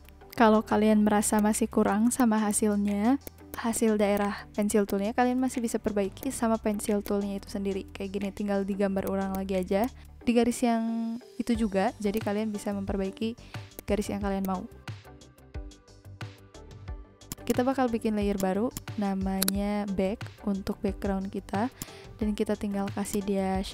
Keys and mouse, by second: 1.3 click, 2.1 click, 3.3 click, 4.4 n, 4.8 click, 6.2 click, 7.0 click, 8.7 v, 9.0 click, 9.6 n, 9.8 click, 12.1 click, 13.7 click, 14.4 click, 16.1 z, 17.2 click, 18.3 click, 21.9 click, 23.0 click.